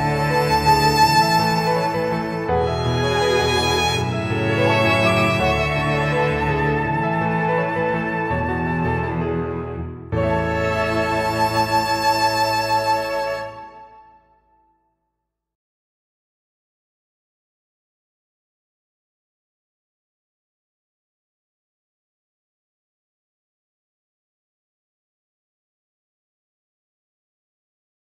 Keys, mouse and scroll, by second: 1.0-1.3 scroll down 1, 1.5 click, 2.0-3.5 scroll up 6, 3.5 click, 4.6 click, 5.5 click, 8.7 click, 13.7 click, 15.8 click, 16.1-17.8 scroll down 11, 17.8-18.3 scroll down 2, 18.4 click, 24.9-25.6 scroll down 2, 25.6-26.6 scroll up 4, 26.6 middle click, 27.5 scroll down 1, 27.8 middle click.